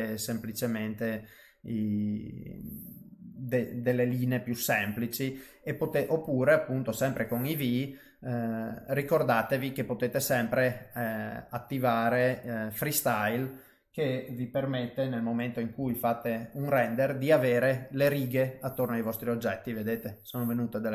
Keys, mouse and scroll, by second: 3.0 middle click, 6.2 click, 7.9 middle click, 11.0 click, 11.3 middle click, 12.7 click, 16.3 F12.